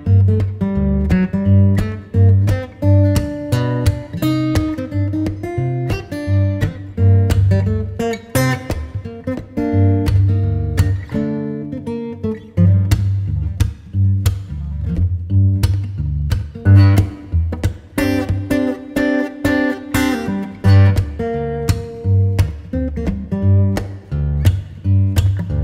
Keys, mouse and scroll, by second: 1.4 ctrl+z, 2.1-2.5 scroll up 5, 2.5 scroll down 5, 3.7 scroll down 2, 4.8-7.4 scroll up 1, 7.4 shift+d, 8.7 s, 11.3 r, 16.8-18.7 middle drag, 18.7 KP_0, 20.1 KP_1, 21.2-22.4 middle drag, 22.4 click, 24.6 s.